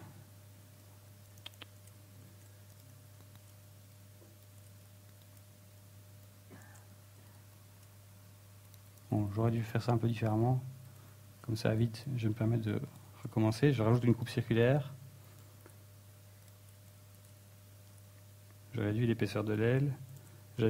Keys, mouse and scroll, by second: 2.0 ctrl+z, 3.9 ctrl+y, 4.3 ctrl+shift+z, 5.3 ctrl+Tab, 6.2 alt+right click, 6.9 click, 7.5 ctrl+z, 8.2 alt+shift+right click, 8.4 scroll up 2, 8.6 middle click, 9.4 a, 11.4 ctrl+z, 11.8 ctrl+z, 12.0 ctrl+z, 12.1 ctrl+z, 12.3 ctrl+z, 12.7 ctrl+z, 12.9 ctrl+z, 13.5 ctrl+z, 13.7 ctrl+z, 14.2 ctrl+r, 15.7 click, 15.8 ctrl+Tab, 16.8 right click, 17.1 shift+right click, 17.4 middle click, 17.9 e, 19.0 click, 19.2 z, 19.5 s.